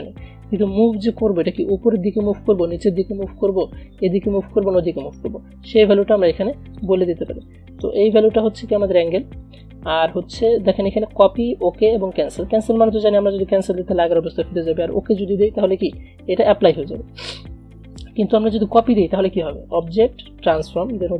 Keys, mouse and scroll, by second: 5.1 click, 15.9 click, 17.4 ctrl+z, 19.9 click.